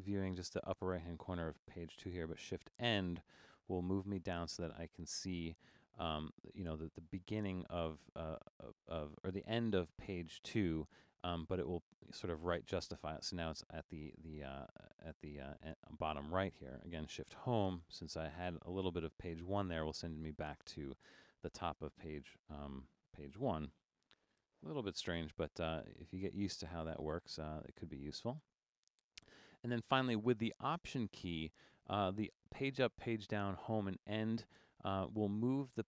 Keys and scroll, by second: 2.6 shift+?, 17.6 shift+/, 23.8 super+0, 23.9-24.9 typing, 25.1 Return.